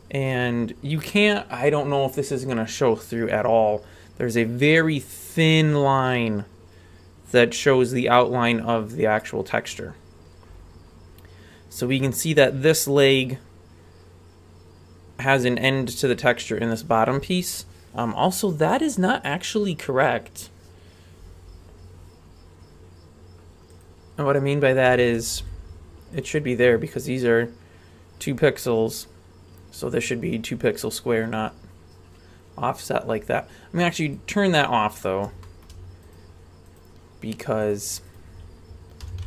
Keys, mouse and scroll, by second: 0.7-1.7 scroll up 1, 1.7-2.9 scroll up 1, 2.9-6.2 scroll up 1, 10.2-11.7 scroll down 6, 11.7-12.7 scroll down 1, 12.7 scroll up 1, 13.3-20.5 scroll up 1, 21.7-23.7 scroll up 3, 23.7 click, 24.4-24.8 right drag, 25.0 shift+right drag, 25.4 g, 34.1 click, 34.6-35.1 scroll down 3, 35.4 shift+middle click, 36.1-37.6 right drag, 37.6 click, 38.1 right click, 39.0 r.